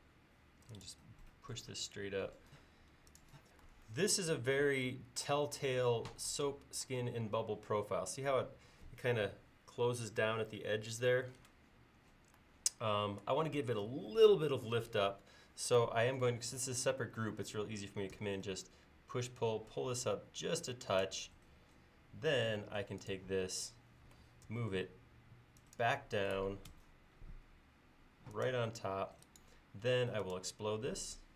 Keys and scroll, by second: 18.1 p, 22.8 space, 24.5 m.